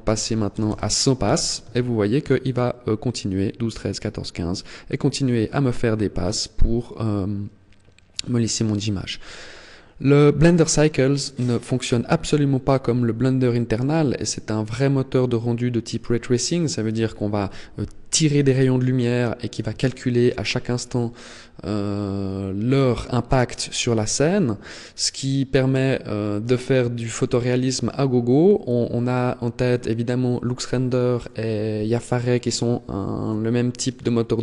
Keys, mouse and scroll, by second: 4.3-4.9 scroll up 3.